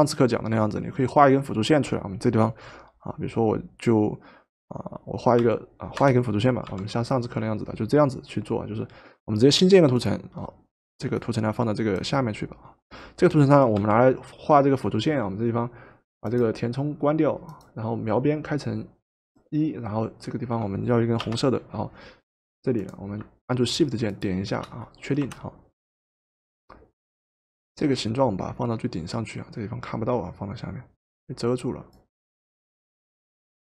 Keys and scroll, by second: 5.3 p, 6.7 p, 13.9 p, 21.2 Return, 25.2 Return.